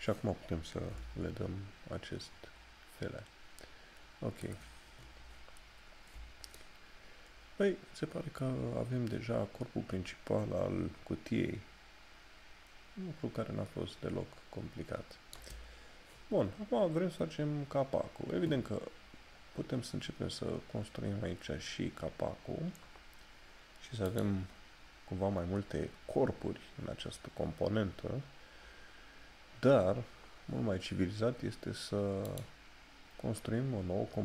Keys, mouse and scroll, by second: 5.9 scroll down 1, 6.8 middle click, 19.6 scroll up 1, 26.9-27.2 scroll up 1.